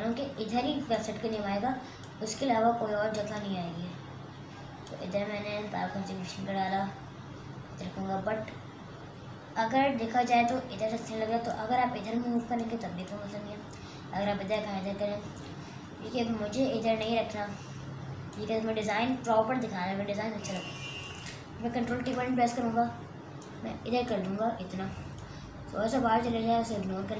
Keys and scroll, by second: 21.9 ctrl+t.